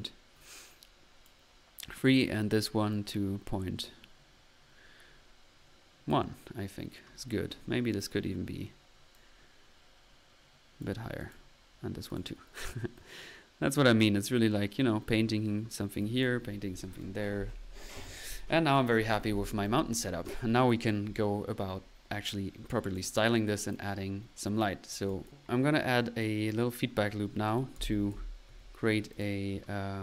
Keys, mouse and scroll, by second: 1.3 click, 2.1 click, 2.9-6.3 drag, 7.9 click, 10.0 click, 12.9-15.4 drag, 15.4 middle click, 16.0-16.8 drag, 18.7-19.4 drag, 20.0 click, 20.9 click, 22.9 click, 23.3 click, 23.7-24.2 drag, 24.1-26.3 typing, 24.8 middle click, 25.1 click, 26.0-26.7 drag, 27.5-28.4 typing, 29.1 click.